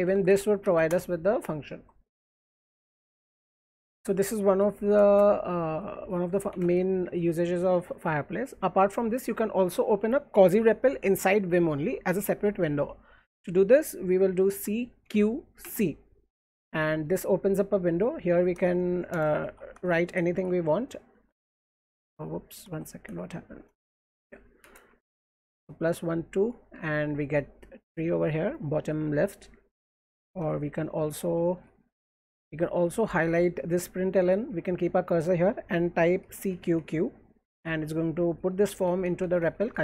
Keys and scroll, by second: 0.3 Up, 0.6 Down, 0.9 Return, 1.5 alt+Right, 2.6 j, 2.8 j, 3.0 j, 4.1-7.3 typing, 14.5-15.6 typing, 16.8-20.2 typing, 20.5 alt+2, 21.9 ctrl+z, 22.6 BackSpace, 23.8 alt+Left, 24.6 space, 24.8 space, 25.2 ), 30.4-33.7 typing, 36.0-37.1 typing, 38.2-39.6 typing.